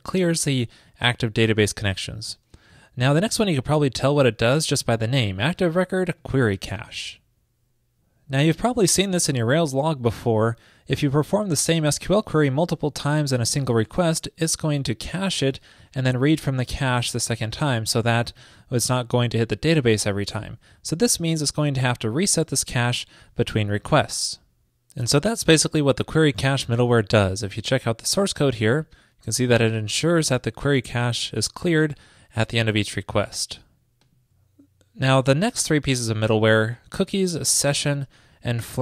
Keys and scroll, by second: 0.0 super+v, 35.1 super+v.